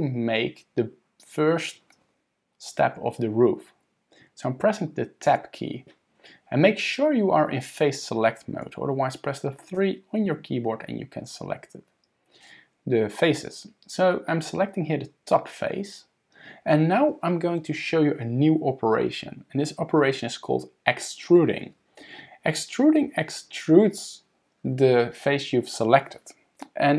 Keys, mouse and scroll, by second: 5.3 Tab, 9.8 3, 12.4 click.